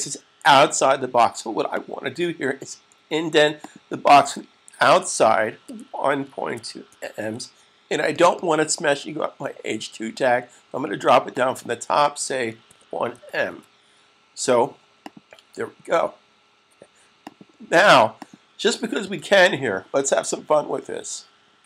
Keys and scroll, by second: 5.3-7.4 typing, 12.4-13.6 typing, 18.8 super+s.